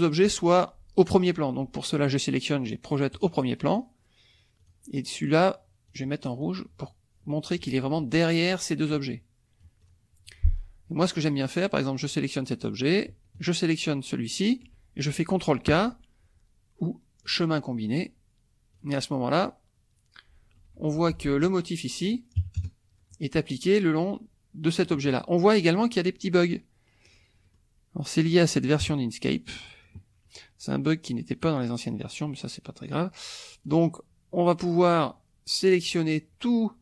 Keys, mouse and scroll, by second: 3.1 click, 3.7 click, 4.6 click, 5.9 click, 6.4-7.6 drag, 8.9-10.1 drag, 12.0 click, 13.4 shift+click, 17.2 click, 18.7 click, 19.4 click, 20.7 F2, 21.0 click, 22.4 KP_Subtract, 22.6 KP_Add, 24.8 middle click, 27.1 click, 27.4 middle click, 27.4 click, 28.8 KP_Subtract, 29.7 click, 31.4-33.8 drag, 35.0-36.1 drag.